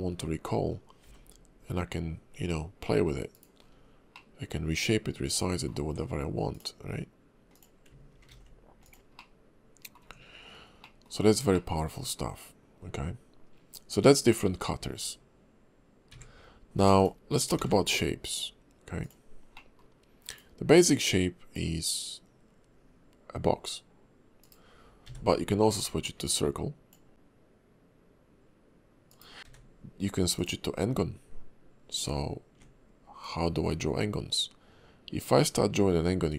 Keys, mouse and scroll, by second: 0.0-1.0 scroll up 2, 1.0 g, 3.6-4.1 scroll down 3, 4.1 middle click, 5.8 Tab, 6.5 click, 7.5 click, 8.3 ctrl+b, 9.2 middle click, 10.0 Tab, 10.8 middle click, 11.5 shift+middle click, 16.1 a, 16.8 x, 17.6 shift+a, 19.5 middle click, 20.3 click, 20.7 click, 25.0 d, 26.3 click, 29.4 middle click, 29.4 d, 33.2 click.